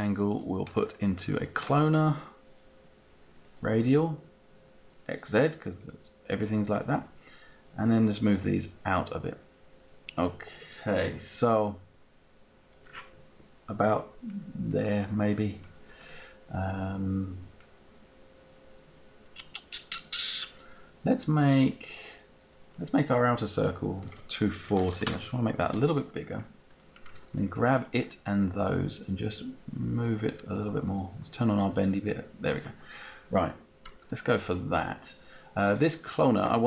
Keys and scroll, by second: 24.6 4, 24.9 Return.